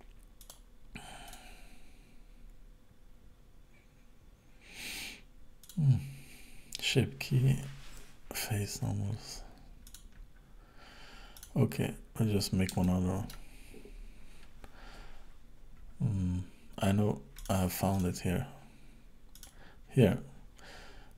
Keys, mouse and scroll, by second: 0.4 click, 1.3 click, 5.7 click, 6.7-8.7 scroll down 6, 8.7-9.7 scroll down 1, 9.9 click, 10.4 scroll down 4, 11.4 click, 11.9-12.4 scroll up 3, 12.4 scroll down 1, 13.2 click.